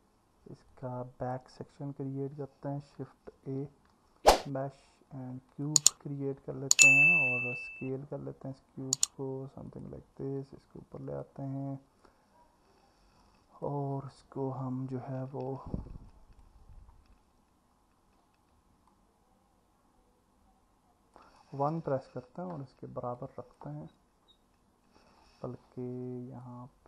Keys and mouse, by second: 0.7 alt+middle click, 3.5 shift+a, 7.4 s, 13.2 click, 16.1 click, 18.9 click, 22.0 KP_1, 23.2 click, 26.4 click.